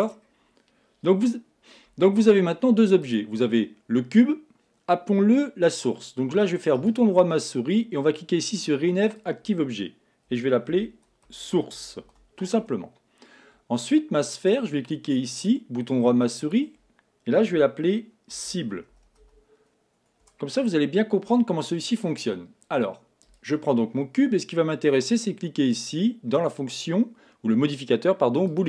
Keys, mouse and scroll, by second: 3.0 click, 6.8-14.0 right drag, 14.3 click, 15.5-19.3 right drag, 23.4 click, 25.1-28.1 drag.